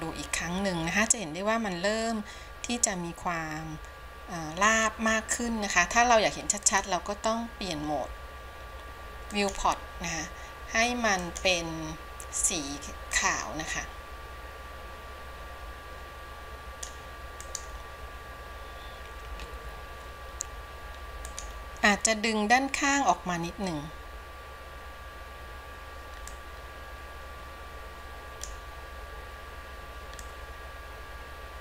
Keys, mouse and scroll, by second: 7.6-21.7 drag, 26.8-31.6 drag.